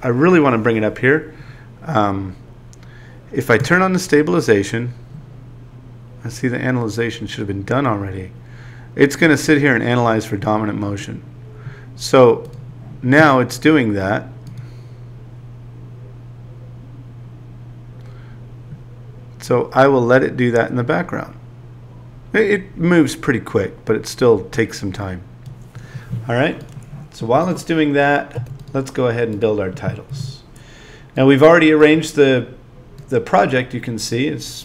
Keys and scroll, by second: 28.4 z, 30.1 a.